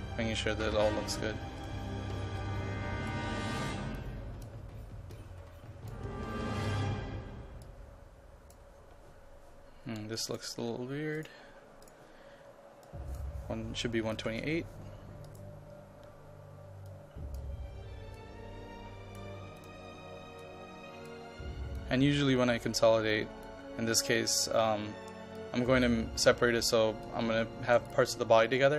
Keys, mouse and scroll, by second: 14.0 KP_1, 14.2 KP_2, 14.5 KP_8, 15.3-28.7 drag.